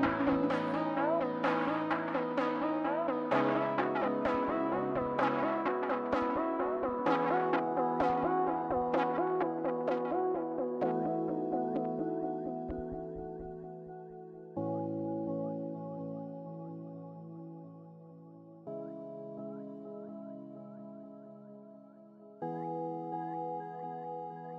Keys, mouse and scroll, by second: 10.1-10.6 scroll up 2, 10.3 middle click, 14.1 scroll up 1, 14.2 middle click, 20.9 scroll down 1, 21.0 middle click.